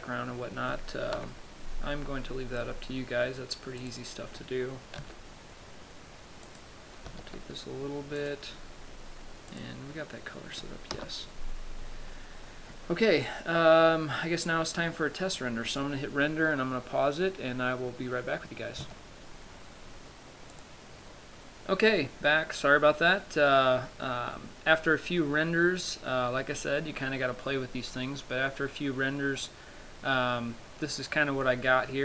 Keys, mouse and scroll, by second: 1.4 KP_7, 2.3-3.5 scroll down 7, 4.3 right click, 5.4 r, 6.9 click, 7.5 g, 8.7 click, 10.0 click, 11.3 KP_0.